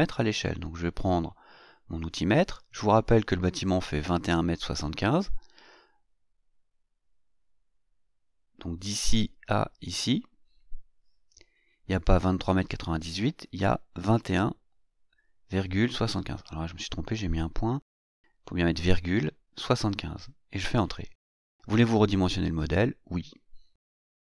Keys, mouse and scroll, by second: 2.7 click, 5.4 click, 7.1 click, 11.5 click, 13.1-14.3 typing, 15.6 BackSpace, 16.8 ,, 17.5 KP_7, 17.6 KP_5, 18.9 KP_Enter, 22.0 click.